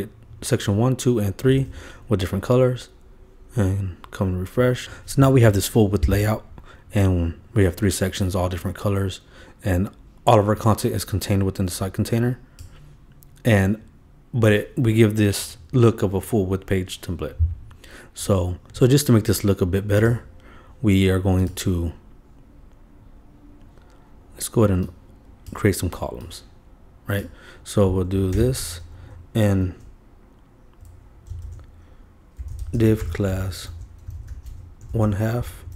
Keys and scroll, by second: 1.5 super+s, 28.3 super+c, 28.9 super+Right, 31.4-35.7 typing.